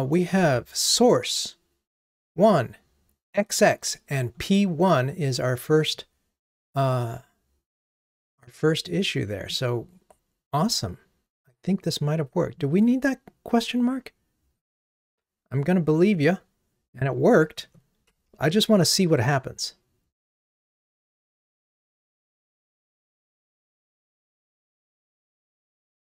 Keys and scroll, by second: 18.4 ctrl+r.